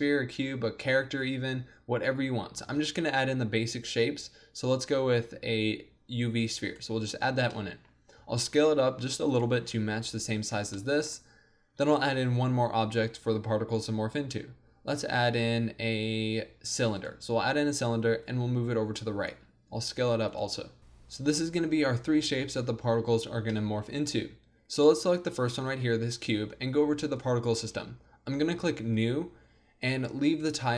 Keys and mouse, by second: 2.7 shift+a, 8.3 s, 10.8 click, 11.8 shift+a, 18.2-20.3 drag, 19.8 s, 24.8-30.7 drag.